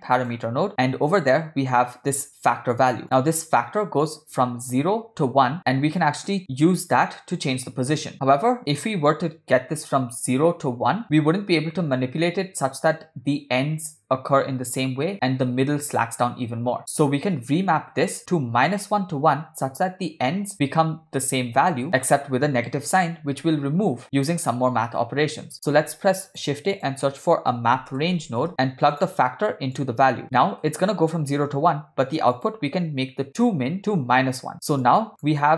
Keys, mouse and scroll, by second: 3.0 click, 25.7 shift+a, 29.8 click, 30.4 middle click, 32.4-33.9 drag, 34.8 click.